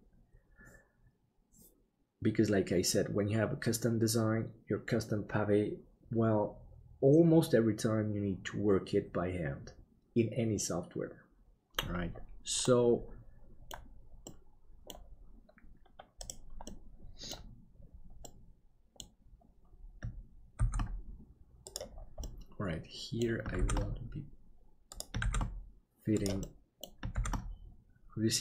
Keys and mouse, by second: 12.7-13.7 middle drag, 14.4 middle click, 16.7 middle click, 18.2 middle click, 20.6 shift+d, 22.2-23.3 middle drag, 26.5 middle click.